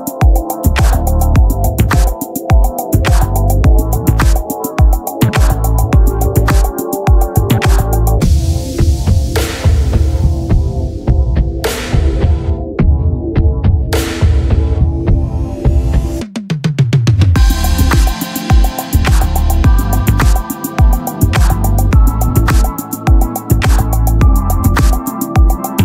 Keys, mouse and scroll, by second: 0.0 click, 0.2 t, 1.1 middle click, 2.1 middle click, 3.3-3.7 ctrl+z, 4.1 ctrl+z, 4.3 ctrl+z, 4.7 ctrl+z, 5.7-7.5 drag, 6.6 Tab, 8.7-12.2 typing, 12.0 click, 12.3 middle click, 13.0 right click, 13.2-14.4 drag, 14.2 t, 14.4 middle click, 15.1 t, 15.2 r, 16.4-17.7 drag, 17.7 r, 19.4 z, 19.6 c, 20.0 click, 20.0 z, 20.2-21.2 right drag, 20.2 c, 21.2-25.7 drag, 23.6 r, 25.7 right click.